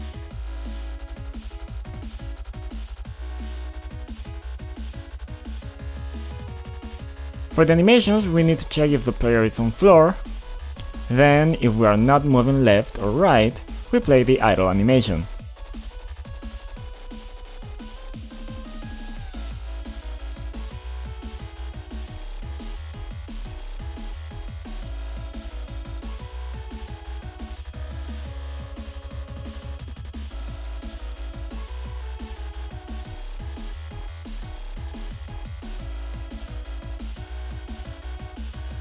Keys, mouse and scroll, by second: 0.0-2.1 typing, 3.5-4.7 typing, 5.3 click, 6.7 click, 8.5 click, 9.8 click, 9.9 double click, 10.4-11.7 scroll down 2, 13.9 click, 14.1 double click, 17.0 b, 18.6 right click, 19.1 click, 20.8 click, 21.3 click, 21.5 right click, 22.1 click, 22.2 click, 24.9 click, 25.0 click, 25.9 click, 26.8 click, 27.3 click, 29.0 click, 30.4 typing, 32.0 ctrl+click, 32.5 click, 33.0 double click, 33.3 double click, 33.6 typing, 34.0 click, 34.4 click, 36.2 click, 36.9 click, 37.2 double click, 37.6-38.5 scroll down 2, 38.5 scroll up 1.